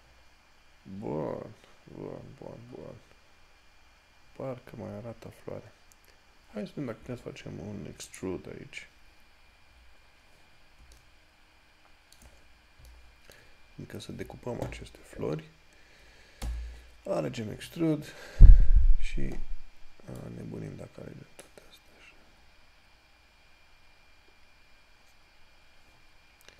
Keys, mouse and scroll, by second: 0.5 scroll down 1, 3.3-4.4 scroll up 1, 4.5 scroll down 1, 8.4 click, 9.9 scroll down 1, 16.1 scroll up 1, 16.7 e, 20.5 click.